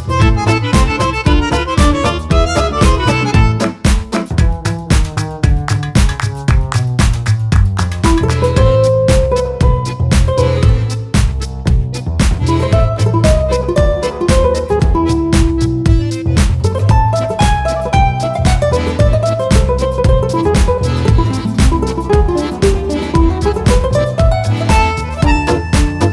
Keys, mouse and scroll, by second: 1.0 KP_Add, 2.3 click, 3.4 KP_Subtract, 5.0 click, 5.9 click, 8.5 ctrl+z, 8.7 ctrl+click, 9.2 ctrl+F2, 9.5 ctrl+click, 10.0 ctrl+F1, 10.6 Delete, 11.0 click, 11.9 F2, 12.5 click, 12.6 F1, 13.4 Delete, 13.6 click, 14.3 F2, 14.6 click, 15.3 click, 16.7 click, 18.8 click, 19.9-21.8 drag, 21.8 F1, 22.1 KP_Subtract, 24.1 click, 24.8 F2, 25.3 click.